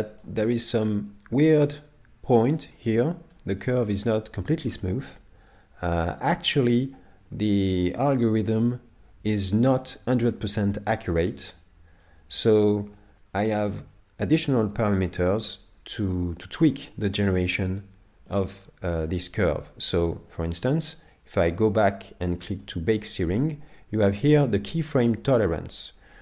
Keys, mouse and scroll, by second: 0.1 middle click, 0.5-1.4 scroll up 2, 2.7 middle click, 3.5-3.9 scroll down 4, 3.9 middle click, 5.1 middle click, 9.8 middle click, 13.3-14.2 scroll down 7, 14.8 middle click, 17.2-17.6 scroll down 4, 17.6 middle click, 18.6 middle click, 20.9 click.